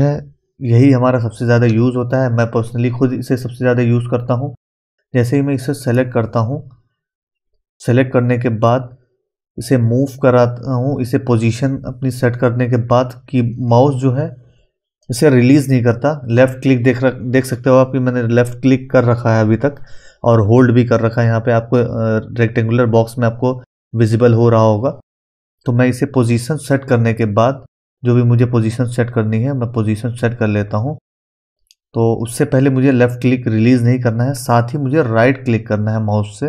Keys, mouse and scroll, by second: 4.6-8.3 drag, 8.7-18.7 drag.